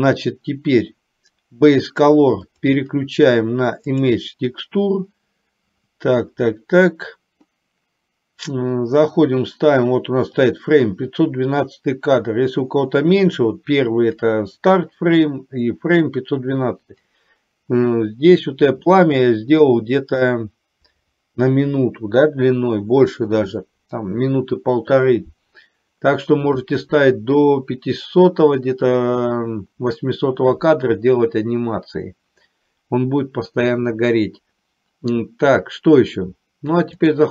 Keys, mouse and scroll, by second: 2.6-4.4 drag, 19.1 shift+middle click.